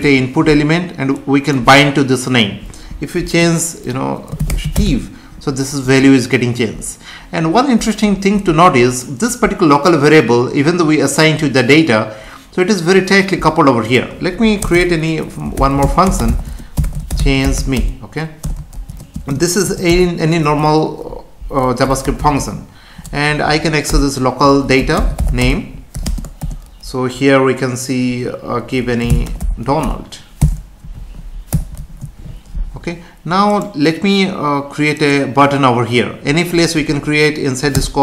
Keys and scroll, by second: 0.0 F5, 14.6 Return, 16.4 space, 18.4 BackSpace, 19.1 space, 19.9 Return, 23.2 Up, 23.9 Return, 25.4 space, 30.9 Right, 33.5 ctrl+s, 37.7 Return.